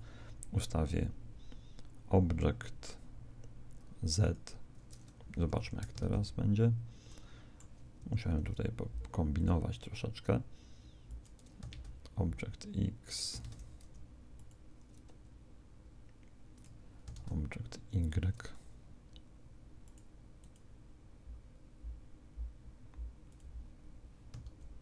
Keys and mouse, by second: 5.5 Escape, 6.0 alt+a, 7.1-9.0 middle drag, 8.0 Escape, 9.4 click, 11.7 alt+a, 13.4 alt+a, 14.4 click, 17.1 alt+a, 17.8 Escape, 19.8 click, 24.4 alt+a.